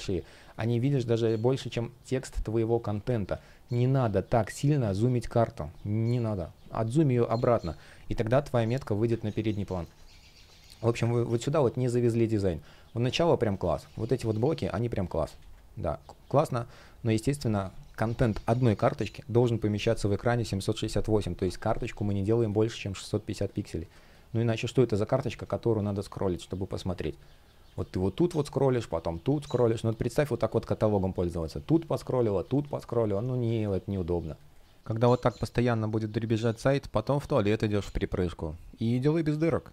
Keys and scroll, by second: 3.0 super+z, 8.9 super+z, 9.6 space, 11.0 space, 12.8 space, 15.0 super+z, 23.6 space, 27.4 space.